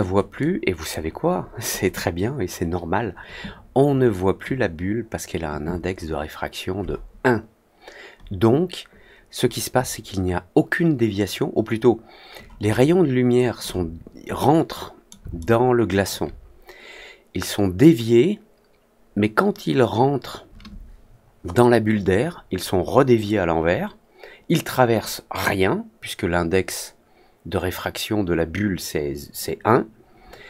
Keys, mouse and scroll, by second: 0.3 click, 12.6-13.5 alt+drag, 14.3 middle click, 15.3-16.0 alt+middle drag.